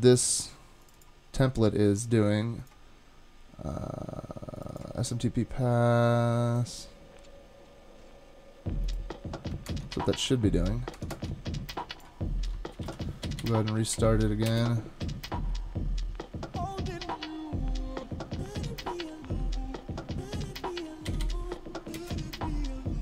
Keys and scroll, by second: 9.7 super+Tab, 10.9 super+Tab, 11.1 super+Tab, 12.8 ctrl+c, 14.5 typing, 22.0 typing.